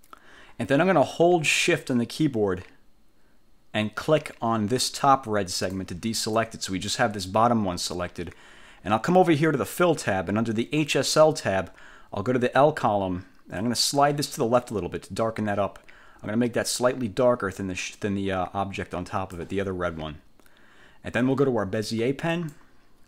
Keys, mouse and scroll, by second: 5.7 shift+click, 13.7-19.7 drag, 22.4 click.